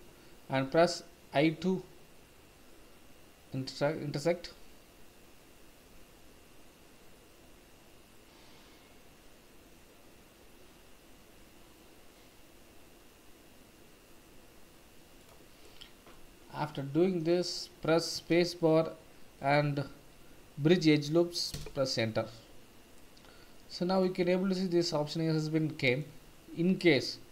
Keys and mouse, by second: 0.7 i, 16.1-17.3 middle drag, 18.2 space, 22.9 middle click, 24.3-26.0 middle drag.